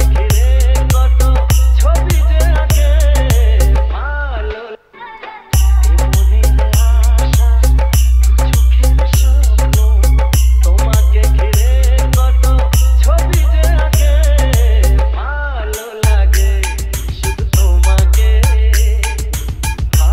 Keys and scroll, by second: 4.9 space.